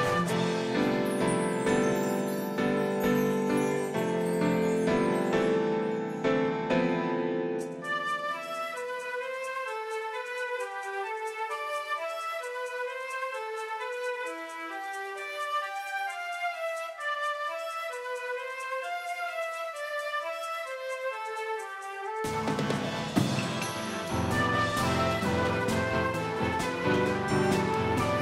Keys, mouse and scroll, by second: 2.9-5.4 typing, 7.4-9.7 right drag, 10.5-13.1 drag, 17.5-21.6 right drag, 19.7-22.2 drag, 25.5-28.2 right drag, 27.0-28.2 drag.